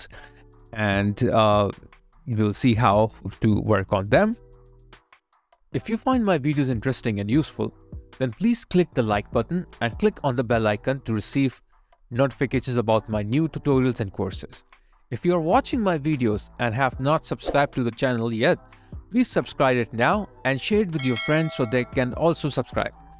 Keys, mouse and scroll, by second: 0.9 alt+middle click, 1.0 alt+scroll up 1, 2.4 alt+right click, 4.6 alt+click, 10.6 alt+right click, 11.9 alt+click.